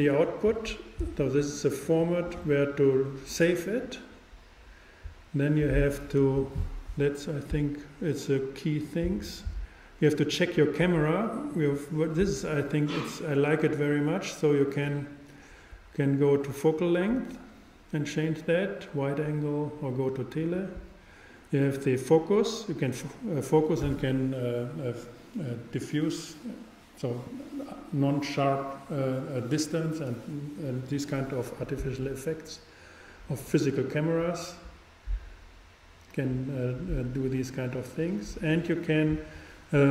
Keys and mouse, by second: 3.5-15.5 drag.